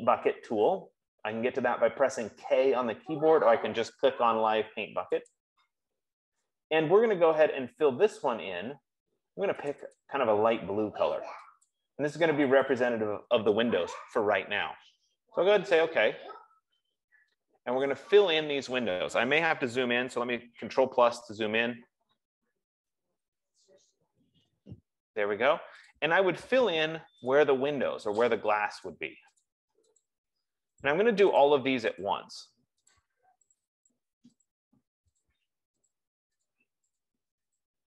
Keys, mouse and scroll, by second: 5.8 click, 10.1 click, 10.4 click, 12.0 click, 13.0 click, 16.1 click, 21.8 ctrl+=, 22.8 ctrl+=, 23.8 ctrl+=, 26.3 click, 27.7 click, 28.5 click, 29.8 click, 30.5 click, 31.9 click, 32.4 click, 33.9 click, 34.7 click, 35.0 F15, 35.6 click, 36.2 click, 37.4 click.